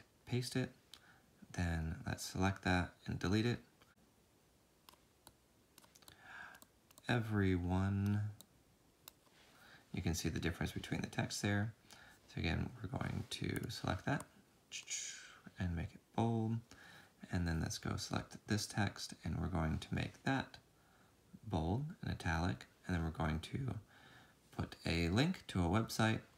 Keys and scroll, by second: 0.5 typing, 1.9-2.6 typing, 16.2 ctrl+b, 17.5 ctrl+b, 22.2 ctrl+i, 24.0 ctrl+k.